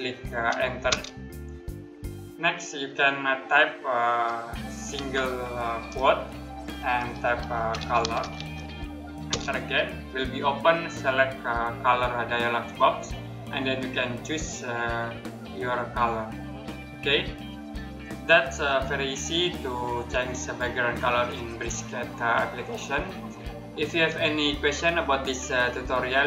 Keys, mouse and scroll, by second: 0.5 Return, 4.6 ', 6.9-8.5 typing, 8.9 Return, 17.6 click.